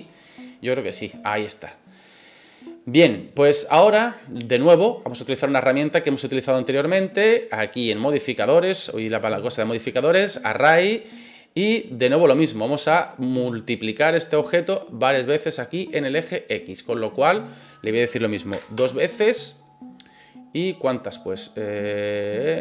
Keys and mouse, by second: 8.8-10.5 drag, 17.4-19.5 drag, 20.3-21.8 drag.